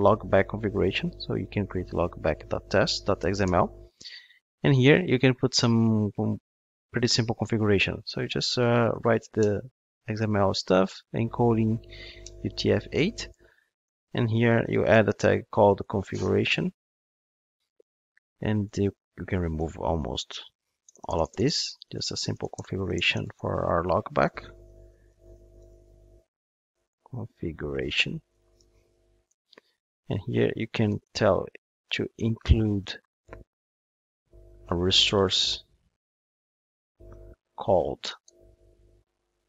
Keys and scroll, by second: 20.9 alt+BackSpace.